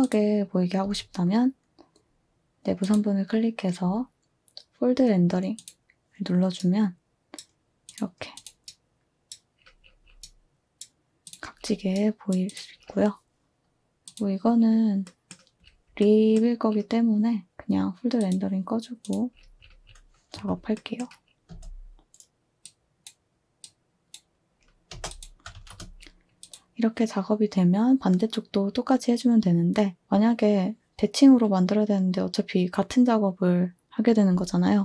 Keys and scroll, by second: 0.8 z, 20.3 2, 21.5 space, 25.5 typing.